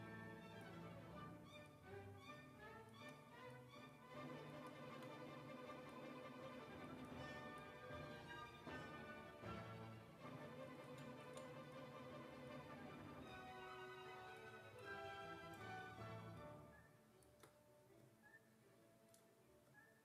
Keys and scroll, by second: 0.0-0.1 typing, 7.0 w, 11.3 ctrl+z.